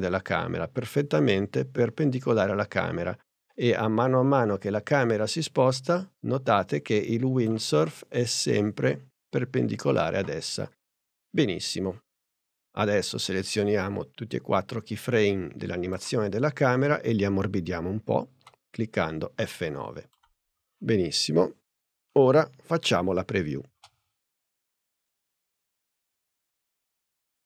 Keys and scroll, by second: 18.5 F9, 23.8 space.